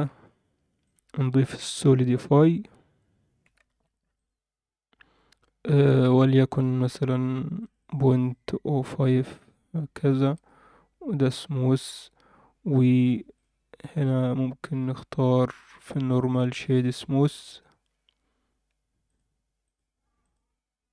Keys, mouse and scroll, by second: 0.1 Tab, 0.8-2.8 drag, 3.8 ctrl+a, 5.9 click, 7.2 click, 7.6 click, 8.1 click, 9.3 click, 10.3-11.3 right drag, 13.3 click, 14.1 click, 14.9-15.6 scroll down 2, 15.6 click, 16.3 click, 19.1 click, 19.7 click, 20.3 click.